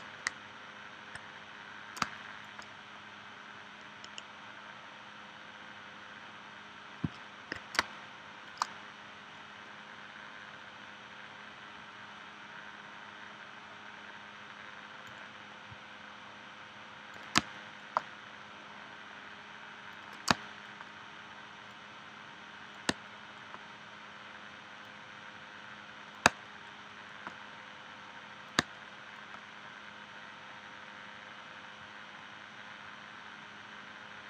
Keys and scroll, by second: 2.0 space, 7.8 space, 17.4 space, 20.3 space, 22.9 space, 26.3 space, 28.6 space.